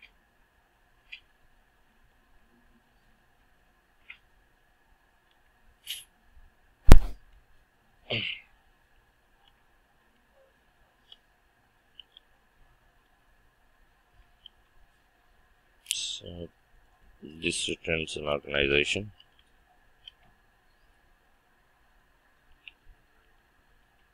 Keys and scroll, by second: 10.0 Return, 20.1 Return.